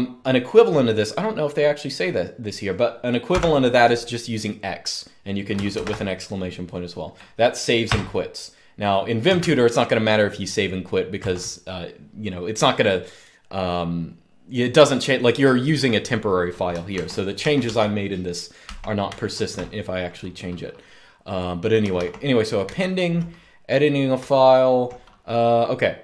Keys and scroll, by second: 3.0 shift+x, 5.6 typing, 7.6 Return, 9.0 Up, 10.9 Return, 16.7 ctrl+d, 17.1 ctrl+d, 17.4 ctrl+d, 18.4 ctrl+d, 18.8 ctrl+d, 21.7 ctrl+d, 22.4 ctrl+d, 23.9-24.5 typing, 25.8-26.0 typing.